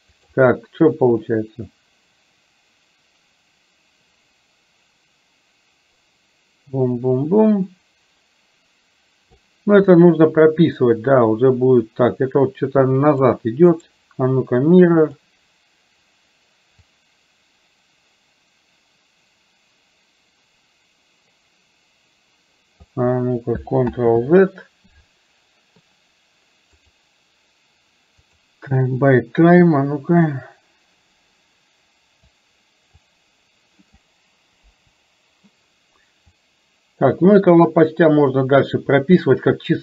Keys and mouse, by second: 1.0-9.4 drag, 10.0-13.3 drag, 13.9-15.3 right drag, 16.9-23.0 drag, 24.0 ctrl+z, 26.9-28.4 right drag, 30.4-32.4 drag, 33.0-34.1 drag, 34.7 Delete, 36.4-39.8 drag.